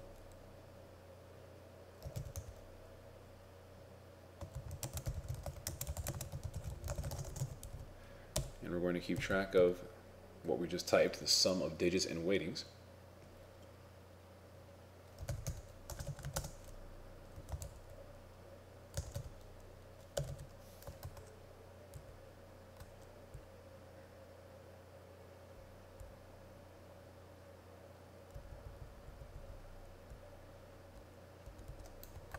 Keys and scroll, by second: 4.6 shift+o, 4.9 shift+d, 5.7 shift+a, 6.3 shift+w, 21.1 ctrl+Tab, 22.0 ctrl+Down.